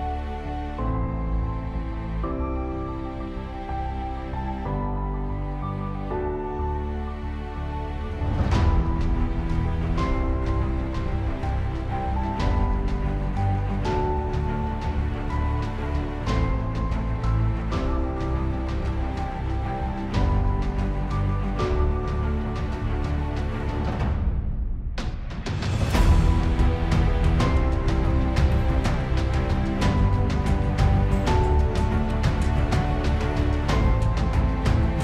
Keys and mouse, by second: 2.1 KP_1, 2.2 Return, 3.6 ctrl+z, 4.8 ctrl+z, 7.0 middle click, 11.2 KP_Decimal, 11.5 Return, 11.8 KP_1, 12.7 KP_Decimal, 13.0 Return, 13.7 KP_1, 13.8 Return, 15.6 ctrl+z, 19.9 ctrl+z, 22.5 ctrl+z, 24.0 ctrl+z, 29.5 KP_Decimal, 29.7 Return, 31.0 KP_Decimal, 31.2 Return, 31.5 KP_Decimal, 31.8 Return.